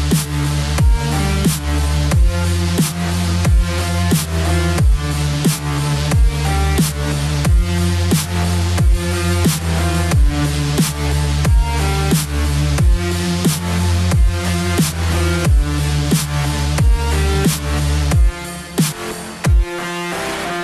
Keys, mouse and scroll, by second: 0.3-2.9 scroll up 8, 2.9-4.5 alt+drag, 4.5 r, 8.5-11.4 middle drag, 11.4 r, 15.1 s, 16.7 KP_7, 17.9 scroll down 2, 18.6-18.9 scroll up 4, 20.0 scroll up 1, 20.0 s.